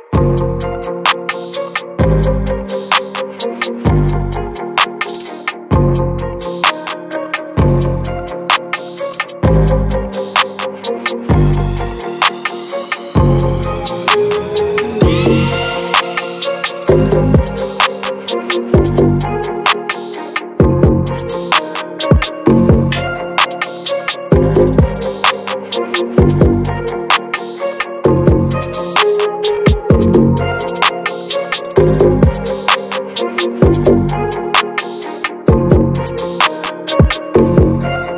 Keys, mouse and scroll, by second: 3.5-5.8 middle drag, 5.8-8.2 drag, 8.2 shift+middle click, 9.0-9.6 scroll down 1, 9.6-10.8 drag, 10.8 ctrl+z, 14.1 click, 14.5-15.0 scroll up 4, 14.6 middle click, 15.1-18.4 shift+middle drag, 18.4-20.1 drag, 20.1-21.4 scroll down 2, 21.4-22.0 scroll up 1, 22.0-23.6 drag, 23.6-25.6 scroll down 2, 25.6-26.8 drag, 26.8-27.1 scroll down 2, 27.1 alt+middle click, 27.6 alt+middle click, 28.3-29.6 drag, 29.6 ctrl+z, 31.4-33.6 drag, 33.6-34.7 middle drag, 34.7 ctrl+z, 35.0 shift+middle click, 35.9-38.0 drag, 38.0 ctrl+z.